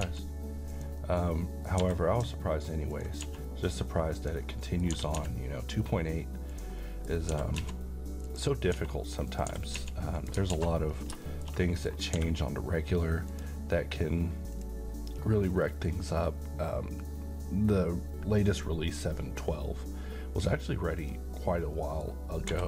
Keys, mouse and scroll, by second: 0.0 z, 0.7 click, 1.0-1.9 middle click, 1.8 g, 2.9 ctrl+click, 3.2 s, 4.2 click, 4.5-5.1 middle click, 4.9 g, 5.1 x, 6.5 click, 6.8 middle click, 7.3 g, 7.6 z, 8.3 click, 8.7-9.7 typing, 9.3 click, 10.2 click, 10.6 alt+a, 10.9 scroll down 1, 11.2-12.2 middle click, 12.1 d, 13.3 click, 21.0 click, 21.7 middle click, 22.5 g.